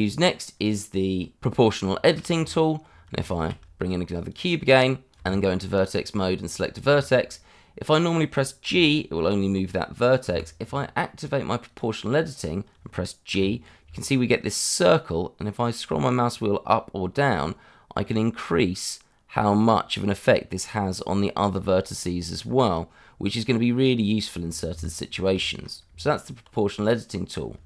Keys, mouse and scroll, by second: 0.3 scroll down 1, 1.5 scroll down 1, 1.9 shift+middle click, 2.3 Tab, 2.9 scroll down 1, 3.2 shift+a, 3.6 click, 4.4 g, 4.7 click, 4.8 shift+middle click, 5.0 scroll up 1, 5.1 Tab, 6.4 click, 7.0 shift+middle click, 7.1 middle click, 8.6 g, 10.2 Escape, 11.6 click, 12.3-13.3 scroll up 1, 13.3 g, 15.8-16.2 scroll up 1, 16.2-18.4 scroll down 1, 21.4 scroll up 1, 23.1-23.7 scroll down 1, 24.7 Escape, 25.1 scroll down 1, 25.4 shift+middle click, 25.8 Tab.